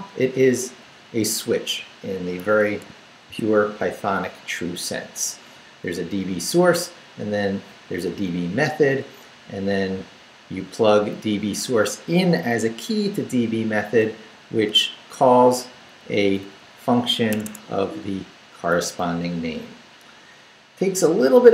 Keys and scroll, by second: 2.4 Escape, 3.3 shift+v, 3.8 shift+Down, 4.4 Down, 9.4 Left, 10.9 Right, 15.1 Up, 15.7 Right, 17.3 Escape, 17.8 Right, 19.0 Right, 21.0 Right.